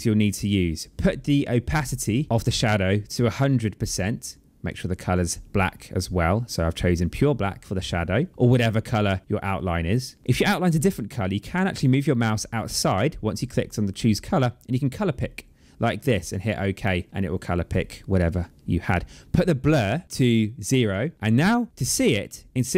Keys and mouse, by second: 2.8 click, 5.0 click, 6.5 click, 7.6 click, 10.2 click, 14.1 click, 16.0 click, 20.0 click, 21.1 click.